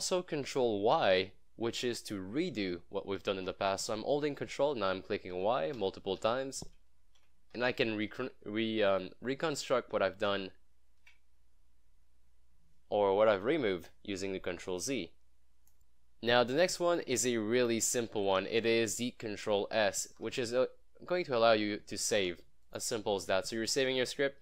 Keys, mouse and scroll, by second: 5.4 ctrl+y, 16.8-19.5 typing, 19.8 ctrl+s, 20.8 scroll down 1, 22.0 ctrl+s, 22.7 click.